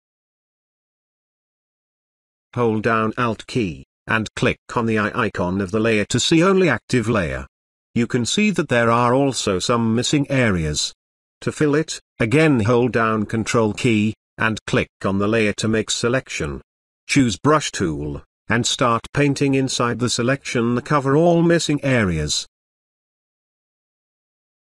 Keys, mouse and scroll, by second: 0.2 drag, 1.7 space, 1.7-2.2 click, 1.9 space, 5.6 alt+click, 5.9 alt+click, 9.8 space, 10.5-12.4 ctrl+drag, 19.2-24.6 drag.